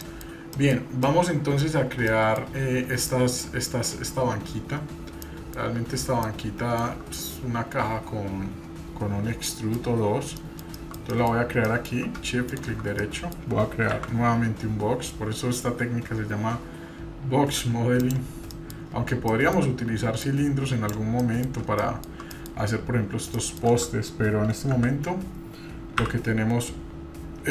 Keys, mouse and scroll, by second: 0.1 shift+middle click, 0.5-1.8 shift+middle drag, 2.5 scroll up 2, 3.1-3.8 shift+middle drag, 4.4-5.1 scroll up 2, 5.3-5.9 shift+middle drag, 6.2 shift+middle click, 7.3-8.2 scroll down 1, 9.2 scroll down 2, 9.5 middle click, 9.9-10.3 scroll up 2, 10.4-10.9 shift+middle drag, 10.8 scroll up 1, 11.1 middle click, 11.4 scroll up 1, 11.6-12.0 shift+middle drag, 12.6 shift+right click, 13.0 middle click, 14.1 shift+a, 18.5 middle click, 18.8-19.2 scroll up 2, 19.3-19.6 shift+middle drag, 20.2-20.9 drag, 21.2 middle drag, 21.5 scroll up 1, 21.8-22.2 shift+middle drag, 22.3 middle click, 23.4 shift+middle click, 24.7 s.